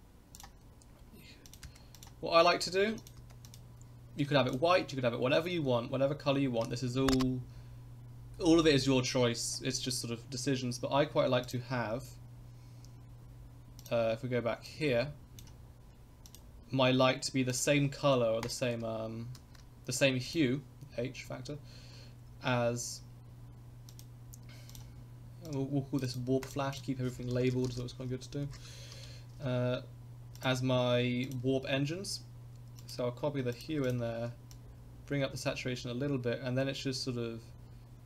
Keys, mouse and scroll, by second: 0.3 click, 11.4 click, 13.8 click, 14.7-15.4 drag, 16.3 click, 17.5 click, 23.9 click, 24.7 click, 25.5 click, 26.1 click, 26.4 click, 26.7-29.4 drag, 30.3 click, 31.2 click, 32.8 click.